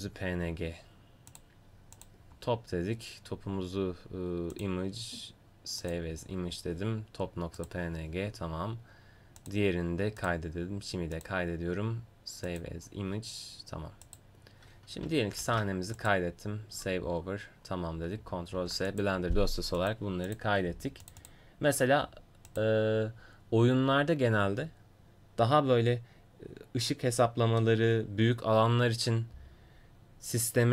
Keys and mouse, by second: 0.0-6.0 drag, 0.0-4.6 right drag, 7.9-12.6 drag, 14.4-15.5 drag, 15.5 ctrl+s, 18.6 ctrl+s.